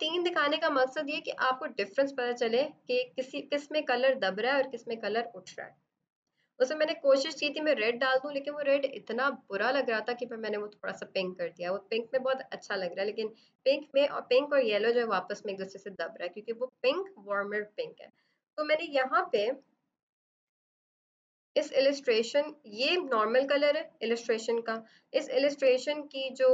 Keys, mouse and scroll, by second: 19.2 v, 21.6 click.